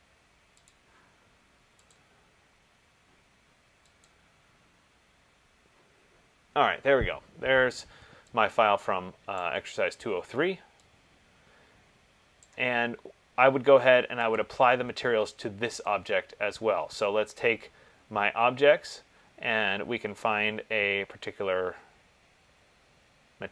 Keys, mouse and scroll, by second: 1.0 click, 2.1 click, 4.3 click, 9.7 click, 12.6 click, 14.6 click, 16.8 click.